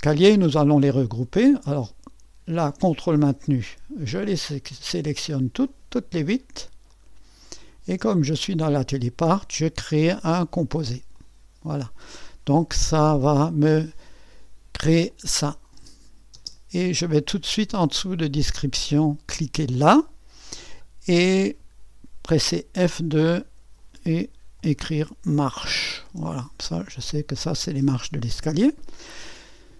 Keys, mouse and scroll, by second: 2.5-16.3 drag, 16.3 space, 19.7-22.8 drag, 23.5 F2, 24.3-26.6 typing, 26.6 Return.